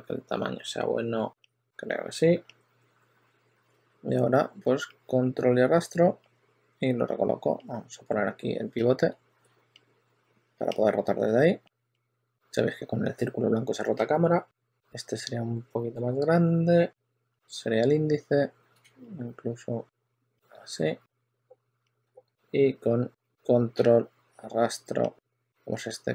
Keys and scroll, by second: 3.6 w, 11.8 w, 17.2 w, 20.8-22.5 typing, 24.7 w.